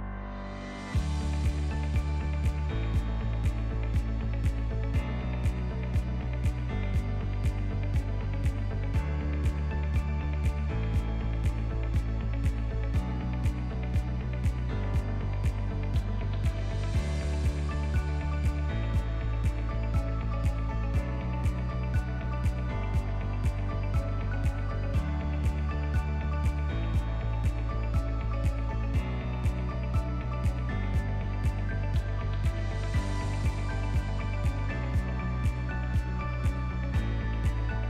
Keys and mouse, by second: 0.5 1, 1.0 alt+z, 5.1 Tab, 5.7 alt+z, 5.9-6.3 ctrl+drag, 7.1-7.7 ctrl+drag, 8.6 Tab, 9.5 click, 10.8 shift+middle click, 12.0 3, 13.7 alt+shift+click, 14.2 middle click, 15.9 ctrl+KP_Add, 16.9 click, 17.8 alt+click, 18.8 ctrl+KP_Add, 19.7 middle click, 19.9 click, 21.1 s, 23.8 KP_1, 24.9 middle click, 25.6 shift+middle click, 26.7 click, 28.3 ctrl+KP_Add, 28.6 ctrl+KP_Add, 29.1 KP_1, 30.1 shift+click, 30.9 s, 34.4 shift+middle click, 35.1 shift+middle click, 36.0 alt+click, 37.1 KP_Add.